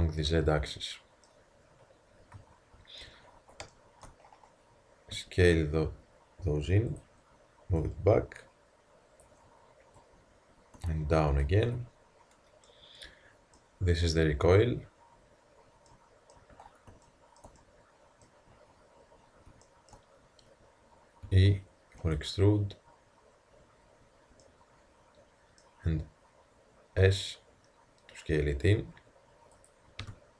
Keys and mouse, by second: 0.2-2.2 middle drag, 2.2 KP_1, 3.7-5.2 middle drag, 5.2 s, 7.8 click, 21.3 e, 27.0 s, 30.0 f.